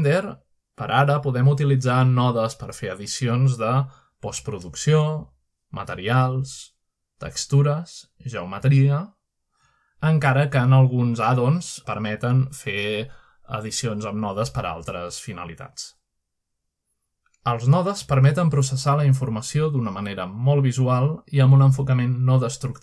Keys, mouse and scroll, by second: 0.5-2.3 scroll up 3, 1.8-2.3 middle drag, 3.5-5.4 drag, 5.6 middle drag, 6.7 click, 7.4-7.9 scroll down 3, 8.2 middle click, 8.5-9.5 scroll down 6, 9.8-11.0 middle drag, 12.2 click, 13.2 scroll down 2, 13.3-13.9 scroll up 3, 16.6 ctrl+alt+Up, 18.2 click, 19.6-21.2 shift+middle drag.